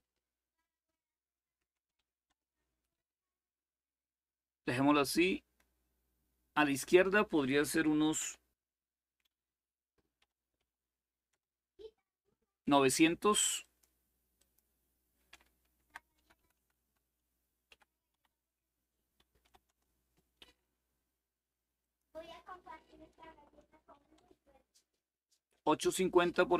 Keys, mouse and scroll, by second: 1.3 Delete, 1.7 7, 2.0 Return, 6.5 click, 8.1-10.4 typing, 11.0 Return, 13.3 click, 14.2 click, 15.5 Left, 15.7-17.9 typing, 19.2 typing, 19.4 Return, 21.3-24.4 typing, 21.5 click.